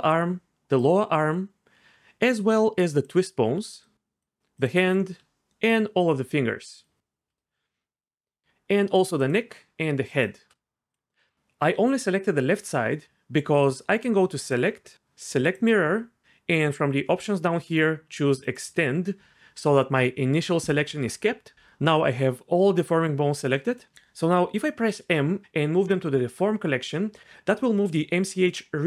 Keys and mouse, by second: 2.4 shift+drag, 9.2 shift+click, 10.9 click, 14.4-15.6 drag, 18.5 click, 24.9 m.